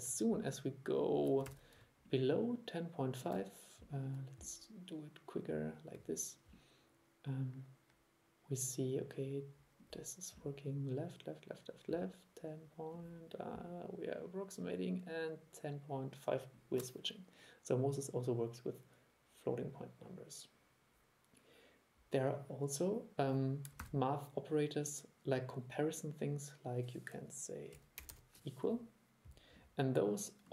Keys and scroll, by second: 1.6 super+e, 23.9 super+1.